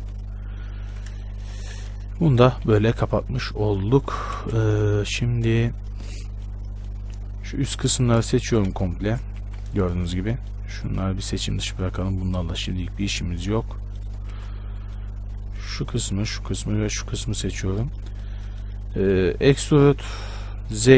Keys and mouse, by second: 1.8 f, 2.9 KP_Decimal, 4.6 shift+space, 8.5 a, 9.6 z, 14.5 z, 19.3 e.